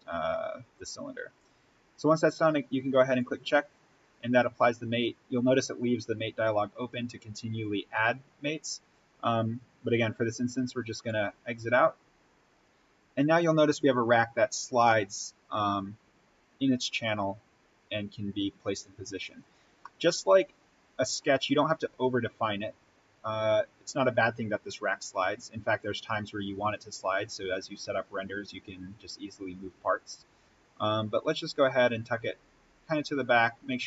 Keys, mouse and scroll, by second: 0.1-0.9 scroll up 1, 2.9 click, 4.1-5.4 scroll up 1, 10.8-19.6 drag, 19.6 scroll up 1, 19.8-21.8 middle drag, 21.8-23.4 scroll down 1, 23.4-33.4 drag.